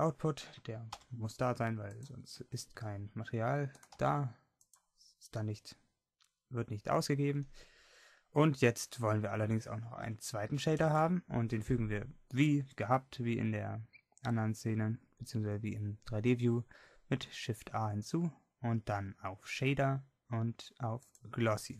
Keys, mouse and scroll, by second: 3.8 g.